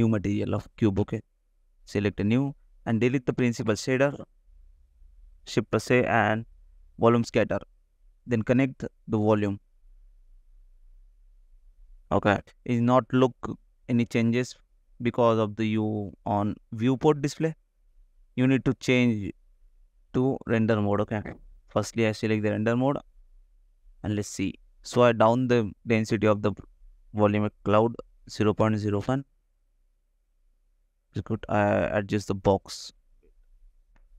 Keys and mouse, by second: 2.9 click, 4.1 middle click, 5.3 shift+Delete, 5.8 shift+a, 10.9-11.9 drag, 12.9 ctrl+s, 28.7-32.3 drag, 30.1 KP_0, 31.0 ctrl+z, 31.4 KP_0, 32.9 click, 33.9 ctrl+s.